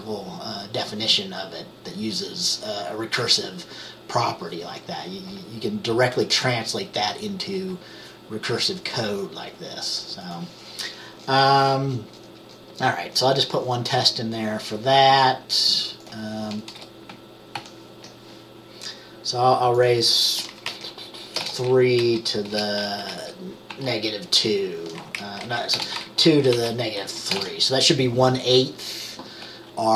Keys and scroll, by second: 16.9 Return, 17.6 ctrl+v, 21.4 BackSpace, 21.5 BackSpace, 22.1 Down, 22.6-23.8 typing, 25.2 Up, 25.5 Left, 25.8 BackSpace, 25.9 BackSpace, 26.2 Down, 26.3 Right, 26.6 Right, 27.1 Left, 27.4-28.2 typing.